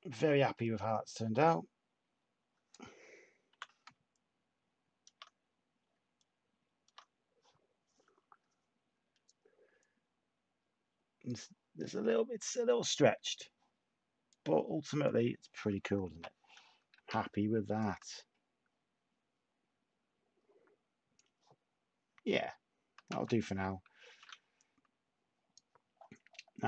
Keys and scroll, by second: 3.4 t, 16.1-17.4 typing, 23.0 s, 24.0 a.